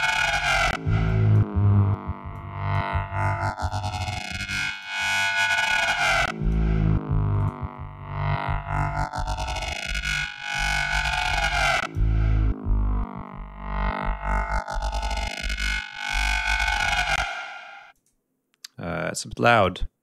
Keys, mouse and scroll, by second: 0.0 click, 1.1 click, 2.4 click, 3.7 click, 4.8 click, 5.8 click, 7.4 right click, 9.6 click, 11.3 click, 12.9-13.6 scroll up 4, 14.4 click, 16.1 click, 17.3 space, 18.0 click, 19.6 click.